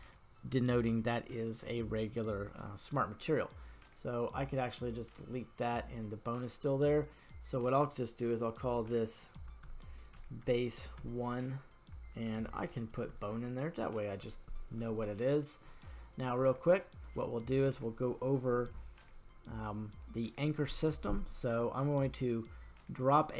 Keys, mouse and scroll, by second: 4.7 click, 7.1-14.3 drag, 16.1-17.7 scroll down 1, 17.7-18.8 scroll down 4, 18.8-20.9 scroll up 4, 22.8 click.